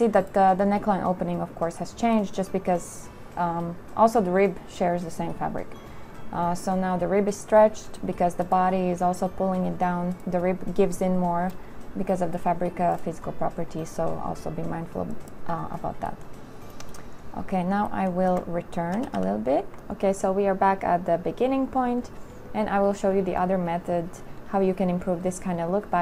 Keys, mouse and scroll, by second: 4.7 click, 19.1 ctrl+z.